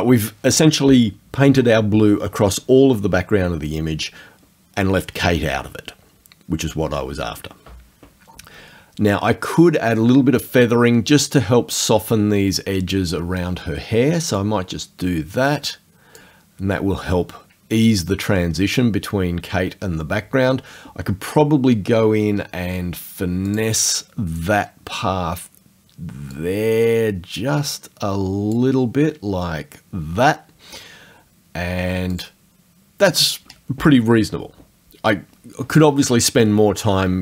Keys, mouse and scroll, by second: 14.4 click, 23.5 click, 26.4-28.7 drag, 28.7-32.1 scroll up 2, 32.1 click.